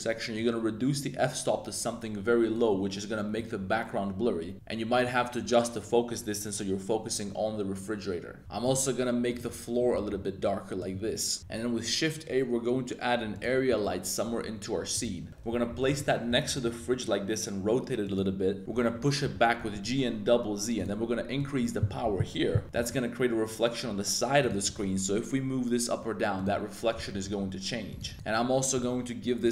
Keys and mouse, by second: 0.3-2.6 drag, 5.1-8.4 drag, 11.4 shift+a, 13.7 g, 14.9 click, 15.3 r, 15.5 g, 15.9-16.4 drag, 16.4 r, 18.0 click, 18.6 z, 19.2 g, 19.5 z, 19.7 z, 21.3-22.6 drag, 22.6 r, 24.0 z, 24.4 click, 24.6 g, 24.8 z, 26.3 click, 26.9-28.1 typing.